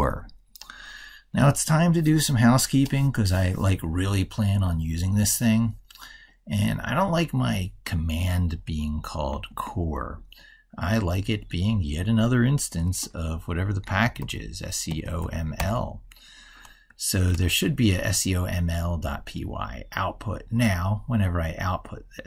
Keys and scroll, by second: 16.9 ctrl+s.